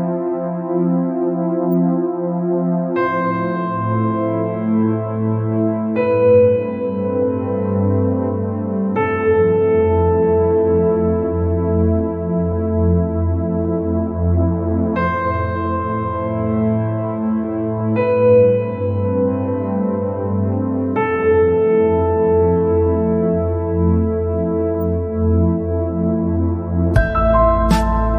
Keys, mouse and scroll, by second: 0.9 click, 1.4-3.0 scroll up 2, 3.6-4.1 scroll down 3, 4.2 scroll up 1, 5.0-5.4 scroll down 1, 5.4-9.5 middle drag, 9.5 click, 10.4 click, 11.6-12.0 scroll up 1, 12.0-13.6 scroll down 2, 13.6 click, 14.3 click, 16.3 click, 18.1 click, 19.5 click, 20.8 click, 23.4 click.